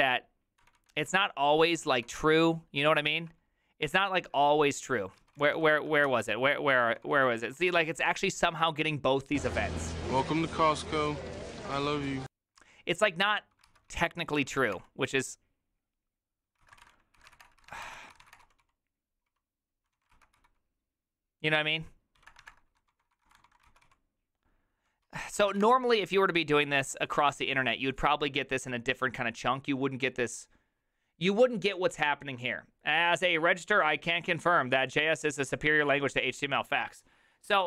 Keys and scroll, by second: 0.0-2.7 typing, 4.0 ctrl+t, 5.2 ctrl+u, 6.8 ctrl+h, 6.8-8.6 typing, 13.9 ctrl+c, 13.9-15.2 typing, 16.5-20.4 typing, 20.1 ctrl+c, 21.9-26.0 typing.